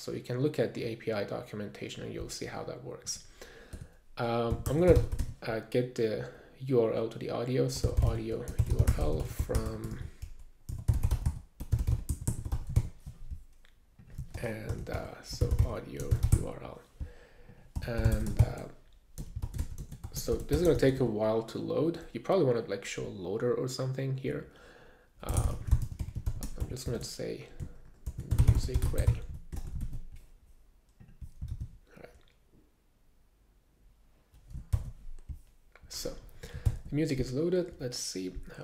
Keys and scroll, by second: 3.8 Return, 4.2-5.6 typing, 7.5-13.0 typing, 14.7 alt+BackSpace, 15.1-21.0 typing, 25.1-30.0 typing, 31.0 super+s, 32.3 super+r, 35.1 alt+super+i.